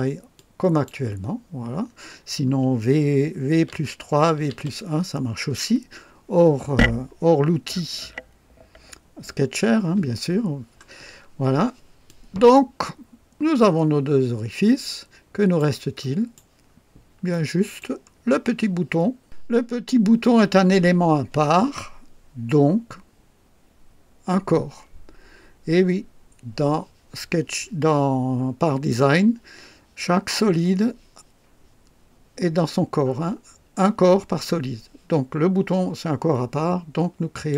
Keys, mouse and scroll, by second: 0.3 click, 1.8 scroll up 3, 2.2 scroll down 2, 3.5 v, 3.7 KP_3, 4.4 v, 4.5 KP_1, 10.5-11.3 scroll down 3, 12.0-15.8 drag, 16.0 right click, 16.7 scroll up 1, 17.3-18.0 right drag, 37.3 click.